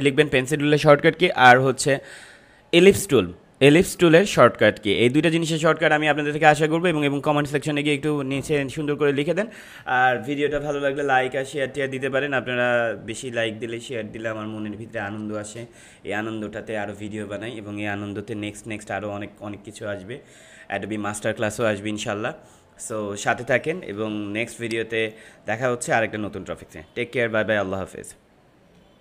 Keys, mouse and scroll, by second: 24.0 space, 24.5 click, 24.7 space, 28.6 space.